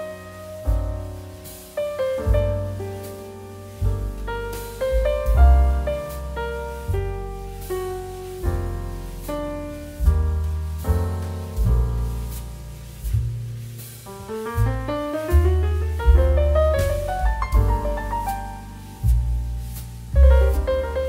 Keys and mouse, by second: 0.3 shift+middle click, 0.5 middle click, 0.8 shift+middle click, 1.1 s, 2.6 click, 3.1 middle click, 3.4 shift+middle click, 3.8 middle click, 4.1 shift+middle click, 4.3 middle click, 5.1 click, 5.4 click, 5.6 shift+click, 6.1 shift+middle click, 6.3 middle click, 6.5 shift+middle click, 7.4 shift+d, 9.8 shift+z, 11.6 click, 11.9 shift+d, 12.5 shift+z, 13.0 click, 13.1 middle click, 13.7 shift+d, 14.0 shift+z, 14.5 click, 14.8 shift+d, 15.3 shift+z, 16.4 click, 17.0 middle click, 17.9 middle click, 19.5 shift+middle click, 19.7 middle click, 19.9 shift+middle click.